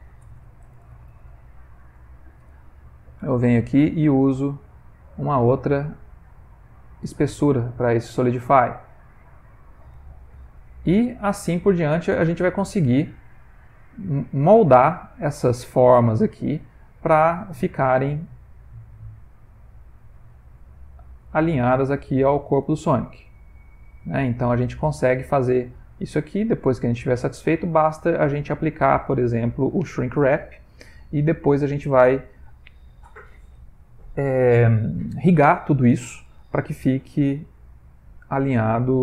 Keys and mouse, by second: 0.4 BackSpace, 4.2 click, 7.6 middle click, 8.3 Tab, 8.9 click, 10.3 2, 10.7 click, 11.2 g, 13.4 click, 14.3 middle click, 14.6 middle click, 15.1 click, 15.3 g, 16.4 click, 16.5 g, 17.4 click, 17.6 g, 18.6 click, 18.8 g, 19.5 click, 19.8 g, 20.4 Tab, 20.6 middle click, 21.3 ctrl+middle click, 21.7 middle click, 22.0 middle click, 22.6 click, 23.3 middle click, 24.6 ctrl+middle click, 25.1 middle click, 28.1-30.0 middle click, 29.7 middle click, 30.8 ctrl+middle click, 31.3 middle click, 37.3 middle click, 38.3 middle click, 38.5 ctrl+middle click, 38.6 ctrl+middle click, 38.9 middle click.